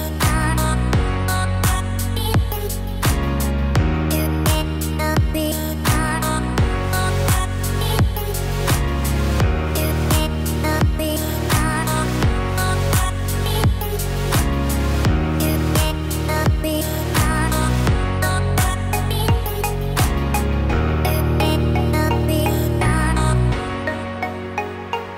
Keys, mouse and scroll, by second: 0.5 middle click, 3.3 Tab, 3.6 click, 4.0 middle click, 5.1 click, 8.0 middle click, 8.0 x, 8.6-9.2 scroll down 3, 9.0 middle click, 9.6 middle click, 10.5 Tab, 11.3 click, 11.8 Tab, 12.9 click, 13.2 click, 15.8 shift+d, 18.5 p, 21.0 click, 21.2 click, 22.5 Tab, 22.8 click, 23.5 click, 24.2 click.